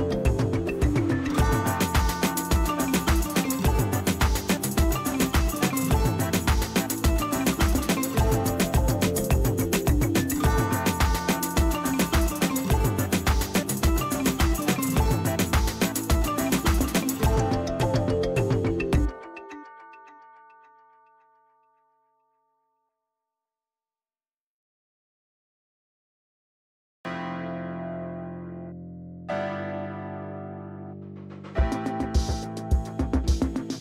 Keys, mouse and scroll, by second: 1.8-4.3 click, 4.6 ctrl+e, 5.5 space, 6.0 ctrl+click, 7.0-8.9 scroll up 1, 9.4 b, 10.6 alt+click, 11.6 scroll down 1, 12.3 ctrl+shift+n, 13.9-15.4 typing, 15.7 click, 19.0 space, 19.2 ctrl+click, 20.4 scroll down 1, 20.8 p, 22.2 click, 27.1 ctrl+z, 27.9 click, 31.8 shift+F6, 33.0 ctrl+space, 33.4 ctrl+click, 33.5 ctrl+space.